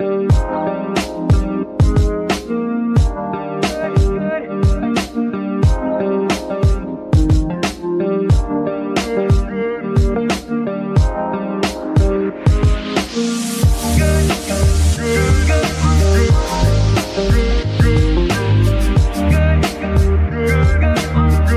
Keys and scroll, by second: 0.8 g, 2.0 Escape, 2.6 g, 3.9 Escape, 4.7 g, 5.2 Escape, 7.1 Escape, 8.6 KP_0, 8.7 KP_Decimal, 8.9 KP_2, 9.1 Return, 9.9 g, 12.1 Escape, 13.0 KP_0, 13.1 KP_Decimal, 13.2 KP_3, 13.4 Return, 14.2 g, 16.0 Escape, 17.7 g.